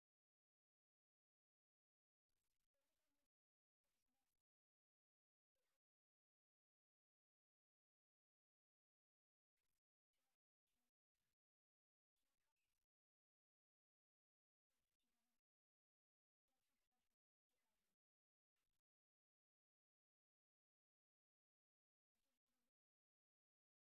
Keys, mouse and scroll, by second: 1.1-6.0 drag, 6.0-9.9 middle drag, 9.9-11.0 drag, 11.3 ctrl+z, 13.6 click, 14.5 click, 15.4 middle click, 17.3-20.0 middle drag, 20.9-22.0 middle drag, 22.9 click.